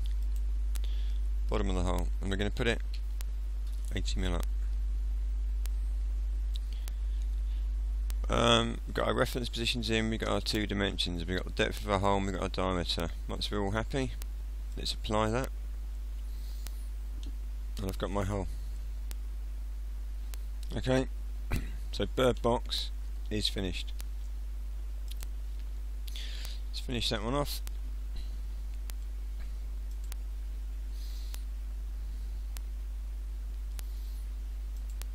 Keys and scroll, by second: 3.0 8, 3.8 0.